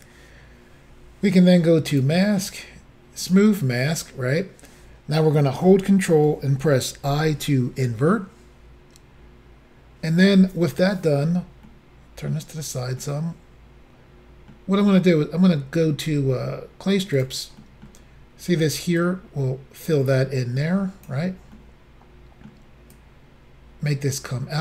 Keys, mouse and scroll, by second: 1.9 click, 3.2 click, 7.1 ctrl+i, 11.7 middle click, 13.0 middle click, 17.2 click, 17.6 middle click, 19.0 click, 21.5 middle click, 22.9 click.